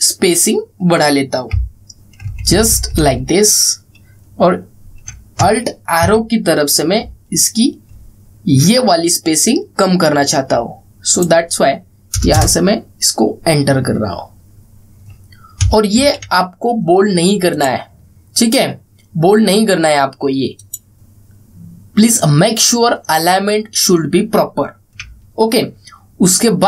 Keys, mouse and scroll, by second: 1.9 alt+Down, 3.0 alt+Up, 6.1 alt+Up, 6.6 alt+Left, 11.8 click, 13.0 Return, 16.3 Return, 16.7 ctrl+a, 18.2 click, 20.9-22.9 drag, 25.8 alt+scroll down 1.